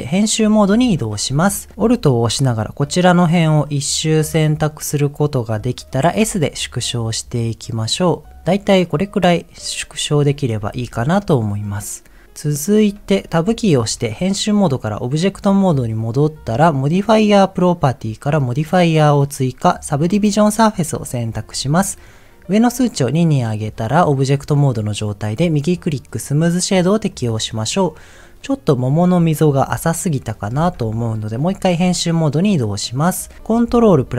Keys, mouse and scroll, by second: 2.9 alt+click, 3.7-5.6 middle drag, 6.1 s, 8.4 click, 8.7-10.8 middle drag, 13.6 Tab, 22.8 click, 25.5-26.5 right drag, 27.1 middle click, 29.8 middle click, 31.5 Tab, 32.8 middle click, 33.9 ctrl+r.